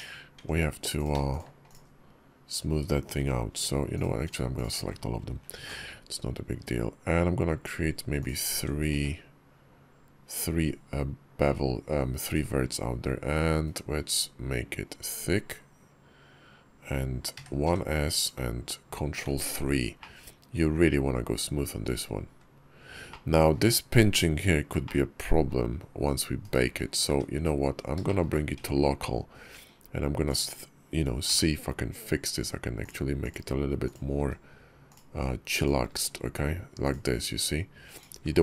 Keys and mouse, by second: 0.2 Tab, 0.8 click, 1.1 shift+click, 1.5 shift+click, 4.1 shift+click, 4.4 shift+click, 8.5 Tab, 8.8 q, 19.1 ctrl+3, 19.8 drag, 20.1-20.7 middle drag, 22.9-23.4 middle drag, 24.7-25.3 drag, 25.1 middle drag, 25.1 right drag, 27.9 shift+click, 28.4 Tab, 30.2 click, 31.1 g, 33.0 click, 34.0 g, 35.7 g, 38.0 g.